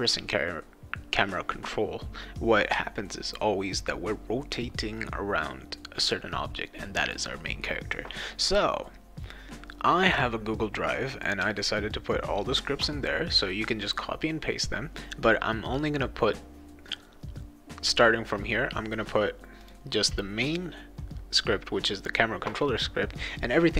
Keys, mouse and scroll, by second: 11.2 click, 19.6 click.